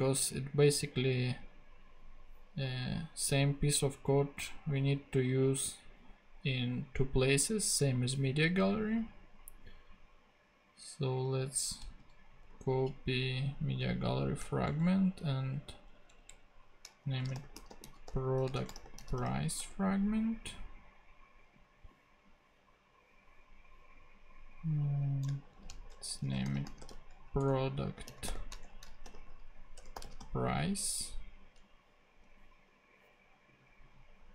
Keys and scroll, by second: 11.8 super+c, 12.3 super+v, 14.0 Left, 14.5 shift+Right, 16.9-19.5 typing, 19.6 Return, 25.5 alt+shift+Left, 26.2-30.7 typing.